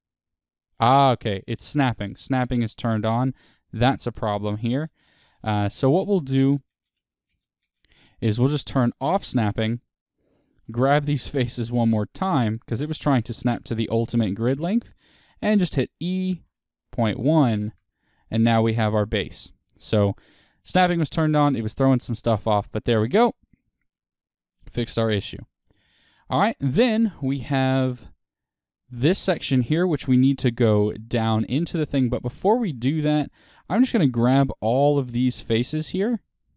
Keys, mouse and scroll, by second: 0.7 right click, 1.3-4.0 middle drag, 2.3-2.8 scroll down 2, 2.8 scroll down 1, 4.0 ctrl+z, 8.8 click, 10.2 middle click, 11.0 click, 11.6 shift+click, 13.7 middle click, 14.8-26.3 middle drag, 16.4 e, 19.6-19.9 scroll, 21.0-21.3 scroll, 26.3 click, 26.9-27.5 scroll down 2, 27.5-31.1 scroll down 1, 31.1-36.5 middle drag, 32.2 click, 33.2-36.5 ctrl+drag.